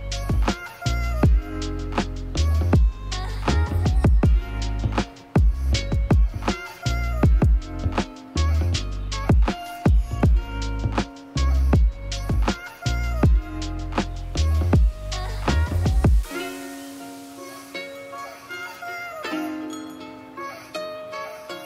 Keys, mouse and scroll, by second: 20.0-21.6 drag.